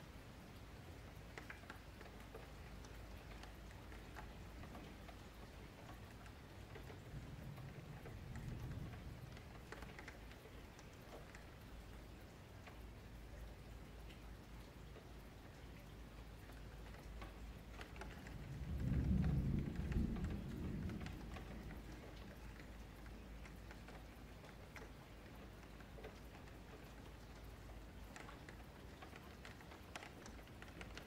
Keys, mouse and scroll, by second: 1.7 Tab, 2.2 ctrl+a, 3.9 middle click, 4.4 click, 4.6 Tab, 5.2 Tab, 5.4 click, 5.7 Tab, 6.0 3, 6.1 click, 6.9 l, 7.8 click, 9.0 click, 9.3 Tab, 9.4 click, 9.8 click, 10.2 Tab, 10.5 2, 10.7 click, 11.4 click, 12.3 shift+Tab, 12.5 click, 14.0 Tab, 14.2 click, 15.5 ctrl+a, 16.1 Tab, 16.7 middle click, 17.0 2, 17.2 click, 17.5 middle click, 18.2 click, 18.5 shift+click, 18.8 middle click, 19.7 ctrl+b, 22.6 middle click, 22.8 Tab, 24.5-27.6 drag, 29.8-31.0 middle drag.